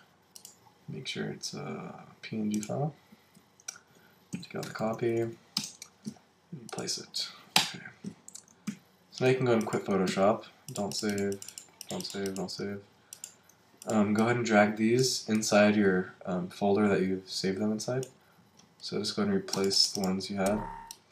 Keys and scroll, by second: 4.3 Right, 5.5 Return, 8.7 super+w, 10.1 super+q.